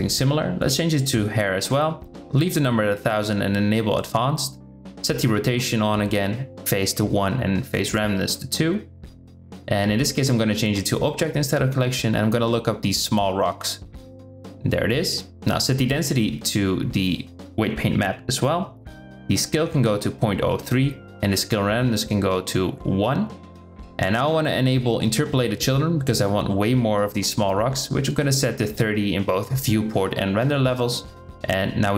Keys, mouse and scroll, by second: 1.1 drag, 6.4 click, 7.6 click, 9.7-10.5 drag, 11.3-14.0 drag, 12.1 l, 15.0-16.3 drag, 18.0-20.3 drag, 20.4-21.9 drag, 25.3 click, 26.8-27.9 drag, 28.2-29.6 drag.